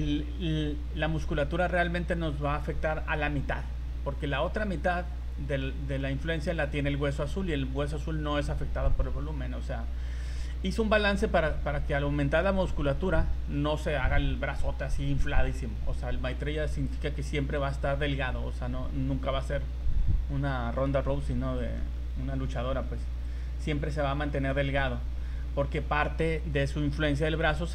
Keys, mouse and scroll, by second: 1.3 right click, 11.1 right click, 19.0 scroll down 3, 20.6 scroll down 3, 21.0 shift+middle click, 21.4 scroll up 2, 21.8 shift+middle click, 23.2 click, 24.1 scroll up 2, 24.5 shift+middle click, 24.9 scroll up 2, 26.4 right click.